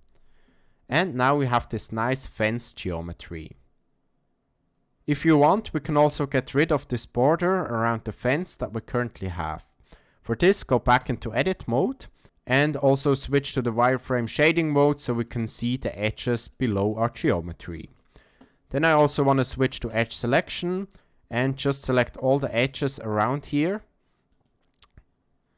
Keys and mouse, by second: 1.1-1.4 shift+middle drag, 1.7-2.2 middle drag, 2.5 Tab, 3.5-4.9 middle drag, 8.9-9.3 shift+middle drag, 9.6 middle click, 11.3 Tab, 15.3 shift+middle click, 16.5-17.7 middle drag, 18.0 shift+middle click, 22.6 ctrl+click, 24.4 ctrl+click.